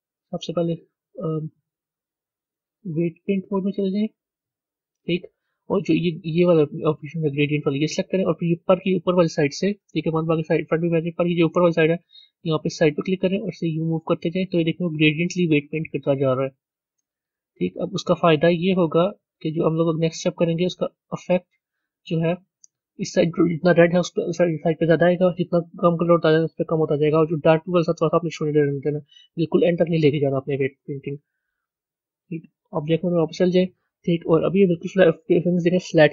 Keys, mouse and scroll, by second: 4.3-9.7 drag, 9.7 KP_1, 13.0 click, 32.6-34.4 drag, 34.4-36.1 middle drag.